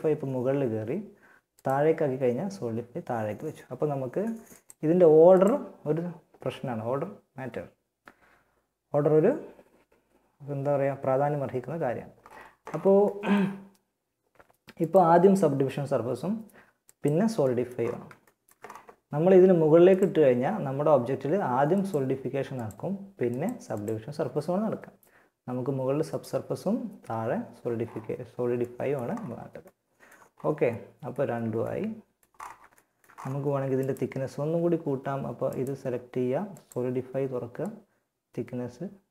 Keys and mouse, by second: 0.7-3.2 drag, 3.7-6.5 drag, 14.1-15.7 drag, 16.1-17.9 drag, 19.1-20.8 drag, 21.0-23.5 drag, 27.0-29.9 middle drag, 30.6 a, 31.3-33.8 middle drag, 38.6 middle click.